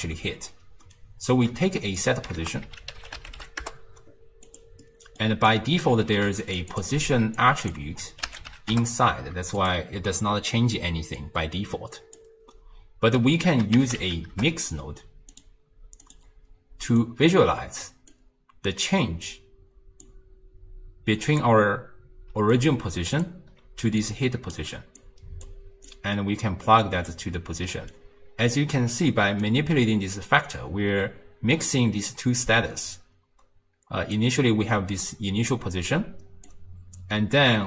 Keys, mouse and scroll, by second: 1.0 shift+right click, 1.7 g, 2.5 ctrl+a, 4.9-5.5 middle drag, 5.5 click, 6.1 g, 6.7 click, 7.4 click, 11.2 click, 13.5 ctrl+a, 16.0-17.3 drag, 17.3-18.1 scroll up 1, 18.1 click, 20.1 drag, 22.3-24.6 typing, 22.6 click, 24.0 click, 25.0 click, 25.9 drag, 27.7 d, 27.9 right click, 28.9 d, 29.1 d, 29.5-32.5 drag, 36.5-37.6 drag.